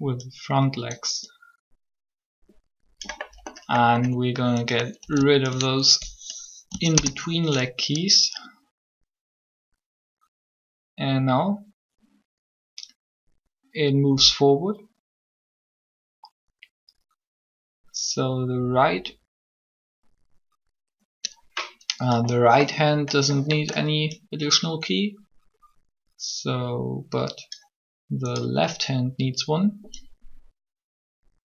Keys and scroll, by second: 5.0 b, 6.6 Delete, 6.9 Delete, 8.1 Delete, 8.1 Return.